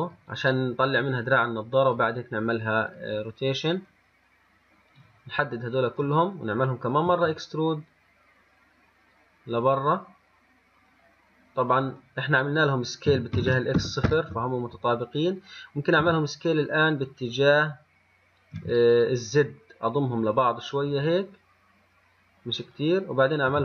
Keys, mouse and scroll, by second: 3.5 click, 3.9 click, 5.2 click, 7.3 e, 13.4 s, 16.2 s.